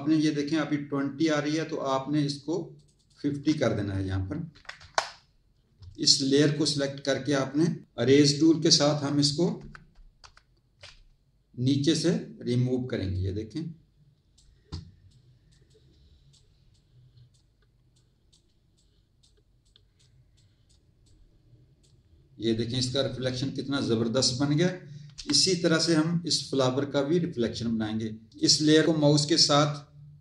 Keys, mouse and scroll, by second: 2.7 click, 4.4 KP_5, 4.7 KP_0, 6.4 click, 10.2 ctrl++, 13.1 click, 15.0 click, 17.9 click, 18.7 click, 25.8 click, 28.3 click, 28.8 click.